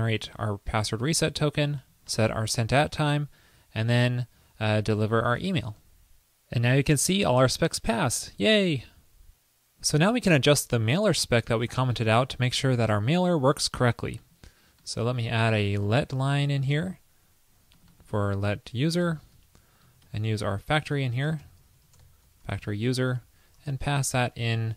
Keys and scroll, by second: 5.9 super+s, 11.7 super+a, 12.5 super+/, 16.2 super+c, 16.8 super+v, 19.5 alt+Right, 20.2 alt+shift+Right, 23.3 alt+Right.